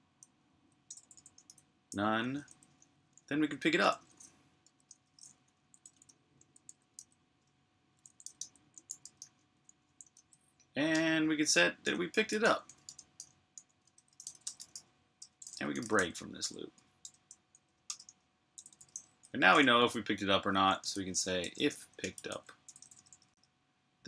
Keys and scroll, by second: 0.7-1.8 typing, 2.9 Return, 2.9 typing, 4.2-5.7 typing.